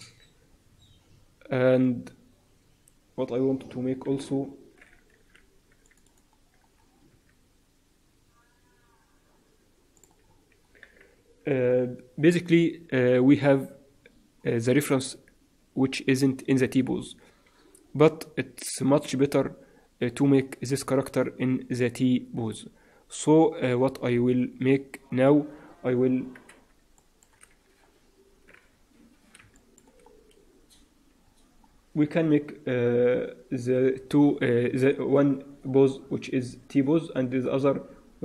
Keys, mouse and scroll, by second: 0.4-2.9 scroll down 1, 3.6-4.2 scroll up 3, 4.2-4.7 scroll up 2, 5.1 ctrl+r, 6.6-7.3 scroll down 2, 7.0 s, 10.2-10.6 scroll up 3, 10.6-11.1 scroll down 3, 11.1 Tab, 11.1-13.3 scroll down 1, 26.9 shift+middle click, 27.4-27.8 scroll up 2, 27.8-28.2 scroll down 2, 28.2-28.6 scroll up 1, 28.6 Tab, 29.5 shift+middle click, 30.0-30.6 scroll down 1, 30.6-31.1 scroll down 5, 31.1-31.6 scroll up 1, 31.6-31.9 scroll down 1, 31.9-32.4 scroll down 1, 33.1-33.7 scroll up 3, 37.3-37.7 scroll down 3.